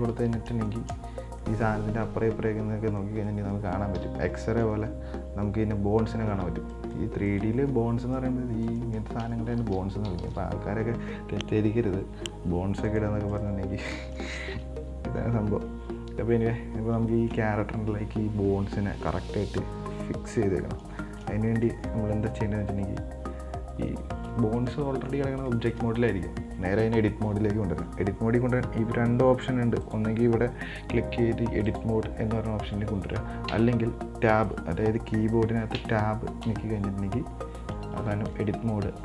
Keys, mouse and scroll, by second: 0.5-0.9 scroll up 4, 0.9-1.4 shift+middle drag, 1.4 scroll down 5, 1.6-4.2 middle drag, 4.2 KP_1, 5.0-7.0 scroll up 4, 7.0 right click, 7.5 right click, 8.0 Tab, 8.3 right click, 9.0 right click, 9.8 ctrl+z, 10.4 ctrl+z, 13.1 right click, 13.5 right click, 14.0-15.7 shift+middle drag, 15.7-17.0 scroll down 3, 17.0-17.3 scroll up 2, 17.3-20.3 shift+middle drag, 21.0 scroll down 3, 21.2 shift+middle click, 21.8 Tab, 24.0 scroll up 2, 24.2-25.3 shift+middle drag, 25.3-25.7 scroll down 1, 25.7-28.8 shift+middle drag, 30.0-33.0 drag, 33.8 Tab, 36.0 Tab, 36.7 Tab, 37.9-38.3 scroll up 4, 38.3-39.0 shift+middle drag.